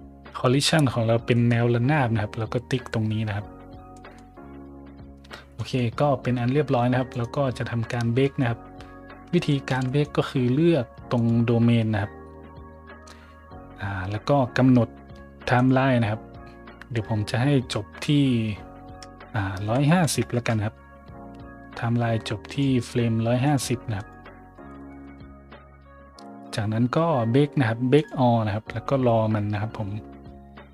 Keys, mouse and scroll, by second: 1.2 middle drag, 3.9 middle drag, 4.4 scroll up 1, 5.5 middle drag, 6.2 a, 7.0 right click, 8.1 middle click, 9.4 shift+middle drag, 9.8 middle click, 11.1 right click, 12.2-13.0 scroll up 3, 13.6 middle click, 14.0 scroll up 1, 15.5 click, 19.6 KP_1, 19.8 KP_5, 20.0 KP_0, 20.3 KP_Enter, 22.4 click, 23.4 click, 23.9 click, 24.5 KP_1, 24.7 KP_5, 24.8 KP_0, 25.0 KP_Enter, 26.6 scroll down 2, 27.9 click.